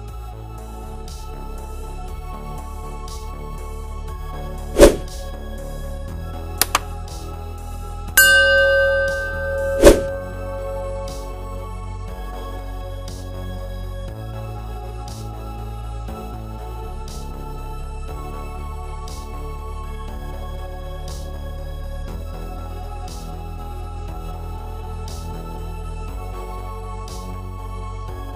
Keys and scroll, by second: 1.3 2, 15.3-16.6 typing, 21.5 5, 22.4 BackSpace, 23.2 4, 23.6 6.